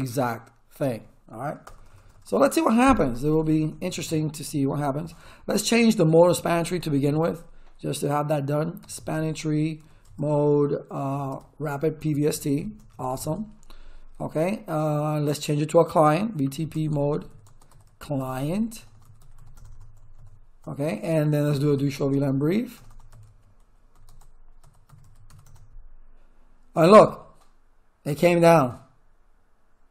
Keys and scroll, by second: 1.6 Return, 3.2-4.0 typing, 5.9-7.4 typing, 8.6-9.8 typing, 10.0 Tab, 11.1 r, 11.3 Tab, 12.0 Return, 16.0-19.8 typing, 21.2-25.8 typing.